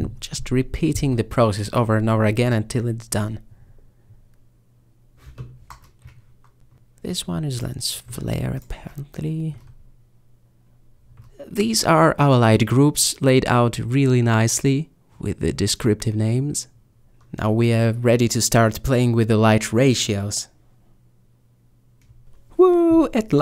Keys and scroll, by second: 0.7-1.3 typing, 1.3 Return, 2.6 m, 3.3 m, 5.0-7.9 typing, 5.6 Return, 8.0 Return.